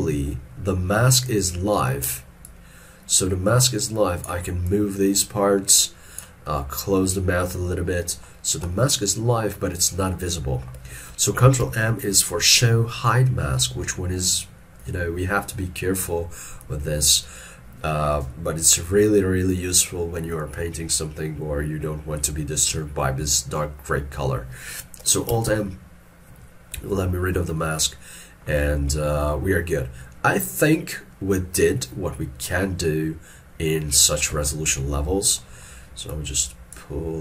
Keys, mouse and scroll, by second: 6.6 middle click, 11.7 ctrl+m, 25.5 alt+m, 27.1 shift+middle click, 35.4 middle click.